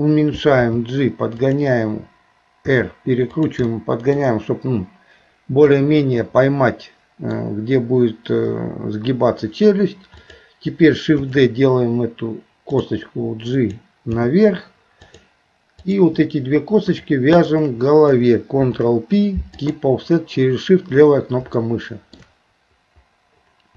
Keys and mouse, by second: 0.6 g, 2.7 r, 3.7 middle click, 5.8-7.4 middle drag, 8.5 KP_3, 11.2 shift+d, 13.5 click, 14.1 g, 15.8 click, 16.9 shift+click, 17.4 shift+click, 18.6 ctrl+p, 21.6 shift+middle click.